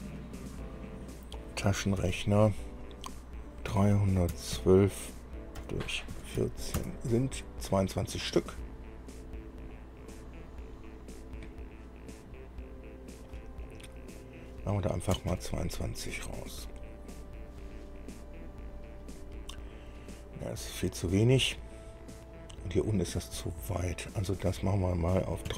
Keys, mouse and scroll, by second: 2.2 ctrl+alt+r, 4.0 KP_3, 4.8 KP_1, 4.8 KP_2, 5.8 KP_Divide, 6.4 KP_1, 6.6 KP_4, 7.0 KP_Enter, 13.9 click, 14.4 click, 15.4 KP_2, 15.5 KP_2, 18.8-19.2 scroll up 2, 19.4-21.0 drag, 21.2 scroll down 2, 24.6 click.